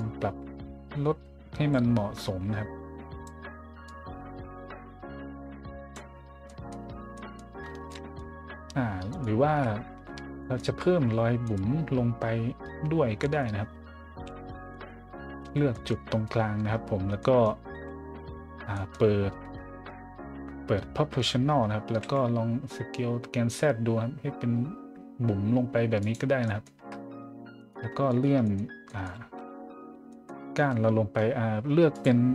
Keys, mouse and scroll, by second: 2.1-3.2 drag, 3.9-5.9 drag, 6.2 middle click, 6.4 middle drag, 7.1 middle drag, 7.5-8.1 middle drag, 9.1 right click, 9.4 Tab, 10.0 z, 10.4 middle click, 10.6 z, 10.7 middle click, 11.4 right click, 12.1 middle click, 12.6 z, 13.2 middle click, 14.3 middle click, 14.7 middle click, 15.4 z, 15.7 middle click, 16.1 middle click, 17.2 middle click, 17.7 z, 18.7 middle click, 19.5-19.9 scroll up 3, 21.6-22.5 typing, 24.4-24.8 scroll up 2, 25.5 scroll down 1, 26.0 click, 26.3-26.6 scroll down 2, 26.7 Tab, 27.6 right click, 28.1 shift+right click, 28.4 middle click, 28.9 middle click, 29.3 middle click, 29.7 scroll down 1, 29.8-30.2 scroll up 2, 31.9 click.